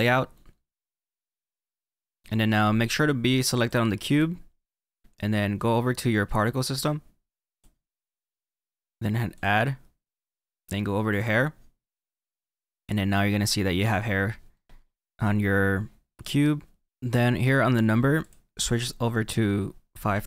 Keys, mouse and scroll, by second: 0.0 click, 3.6 click, 9.6 click, 11.8 click, 14.5-16.5 middle drag.